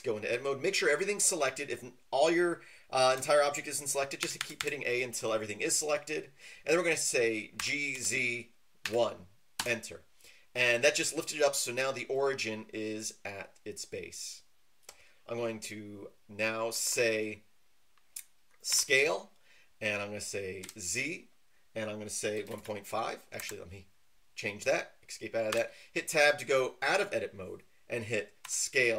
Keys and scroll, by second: 4.2-4.5 typing, 7.6-8.8 typing, 9.6 Return, 18.7 s, 20.6 z, 22.3 KP_1, 22.4 KP_Decimal, 22.7 KP_5, 23.4 Escape, 25.5 Tab, 28.4-28.9 typing.